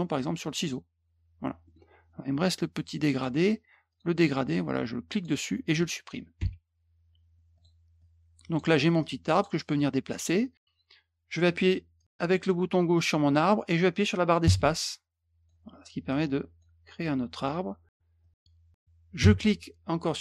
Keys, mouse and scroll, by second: 0.5 click, 1.6 middle click, 3.9 click, 4.5-5.2 drag, 7.5 click, 8.0-8.5 drag, 9.0-9.4 drag, 9.7 click, 12.0-15.4 drag, 14.4 space, 16.1-16.6 drag, 17.0 click, 18.2-20.2 drag, 19.2 space.